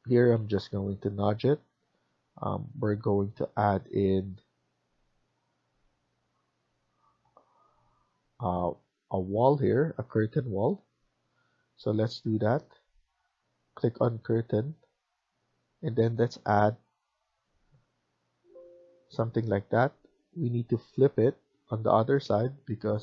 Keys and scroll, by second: 0.1 typing, 0.5 Down, 1.4-2.1 typing, 19.1 Escape, 19.4 Escape.